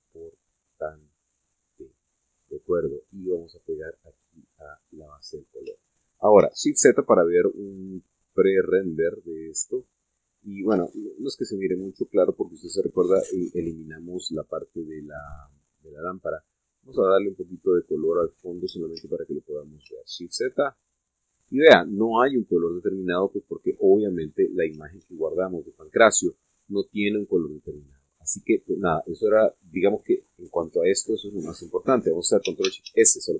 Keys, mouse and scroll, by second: 3.8-5.9 drag, 7.2 shift+z, 8.4-11.6 middle drag, 11.6 shift+z, 12.0-12.6 shift+scroll down 1, 13.1 Tab, 13.5-13.8 scroll up 1, 13.8 scroll down 1, 16.2 click, 17.1 click, 17.6 click, 18.9 click, 19.8 shift+a, 20.9 shift+z, 21.5-21.9 shift+scroll up 1, 22.4-24.9 middle drag, 25.9 shift+z.